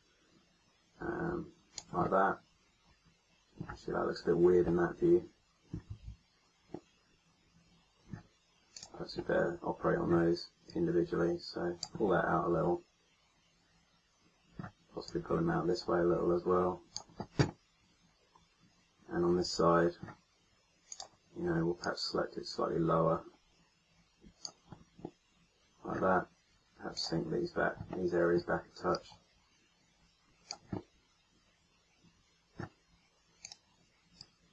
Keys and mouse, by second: 1.9 middle click, 5.8 ctrl+z, 8.6-10.3 drag, 12.0 middle click, 12.1 click, 14.2 middle click, 15.0-16.6 drag, 19.4-22.7 middle drag, 22.7 click, 26.8 right click, 31.4 middle click.